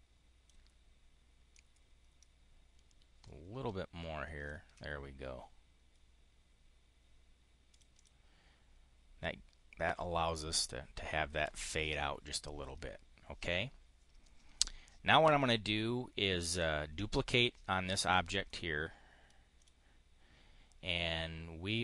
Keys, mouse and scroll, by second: 1.4-4.4 ctrl+drag, 7.5 click, 16.3 click, 18.3 click, 19.5 click.